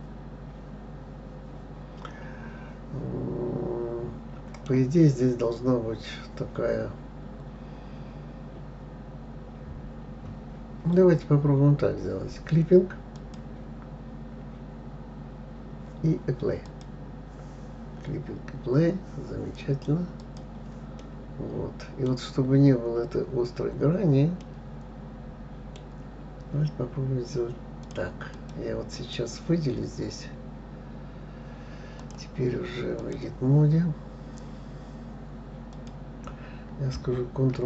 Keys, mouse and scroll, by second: 5.1-5.6 scroll up 1, 7.3-10.4 scroll down 3, 13.6 click, 17.0 click, 20.6 click, 21.4-23.1 middle drag, 23.1-24.8 scroll up 2, 24.8-27.8 middle drag, 28.2 click, 28.7 click, 29.4 click, 32.4-35.4 drag, 36.1 click.